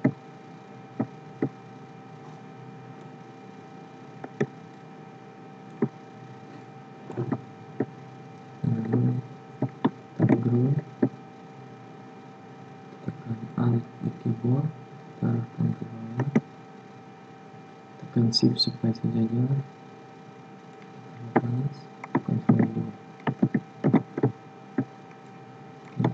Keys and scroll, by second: 10.2 ctrl+g, 22.4 ctrl+d.